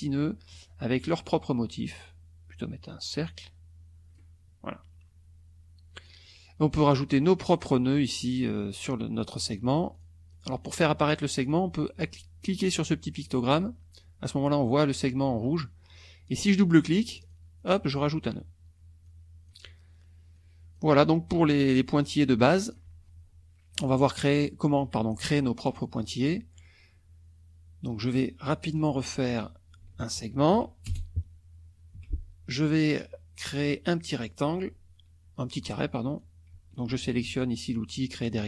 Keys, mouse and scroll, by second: 2.1-4.3 drag, 5.9 click, 9.9 click, 10.3 click, 11.4 click, 13.2 click, 17.1 click, 19.1 click, 20.3 click, 22.0 click, 24.6 middle click, 25.7 middle click, 25.8 click, 28.8 click, 29.3 click, 30.1 ctrl+shift+click, 30.8 ctrl+shift+Return, 32.0 F1, 34.3 click, 36.2 click, 37.3 ctrl+z.